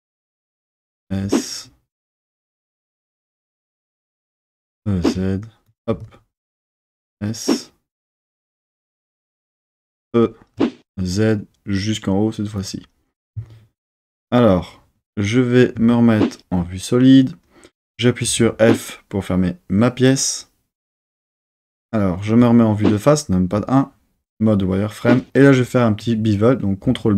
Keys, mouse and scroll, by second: 0.4 click, 0.7 s, 2.8 click, 4.5 e, 4.8 z, 5.6 click, 5.9 s, 10.0 click, 10.0 e, 10.6 z, 12.6 click, 15.7 z, 18.2 f, 22.3 KP_1, 23.5 z, 26.8 super+b.